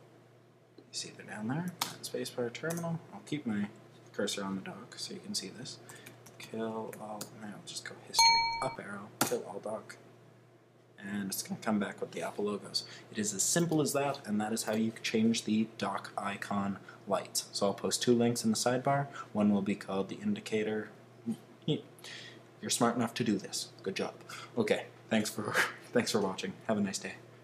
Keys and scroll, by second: 2.6 Return, 6.7-7.2 typing, 8.5 Up, 9.2 Return.